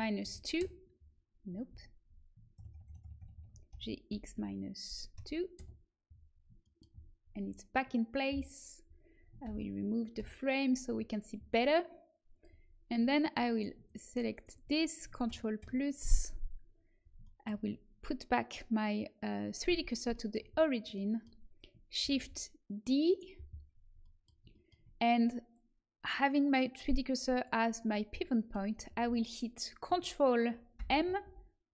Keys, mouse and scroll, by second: 1.6 ctrl+z, 2.5-3.3 ctrl+KP_Add, 3.6 g, 9.4 ctrl+i, 10.1 h, 12.3-15.2 drag, 13.5 middle click, 13.5 right click, 15.2 ctrl+KP_Add, 15.5 ctrl+KP_Add, 19.6 shift+c, 22.0 shift+d, 25.9-27.8 drag, 30.7 ctrl+m.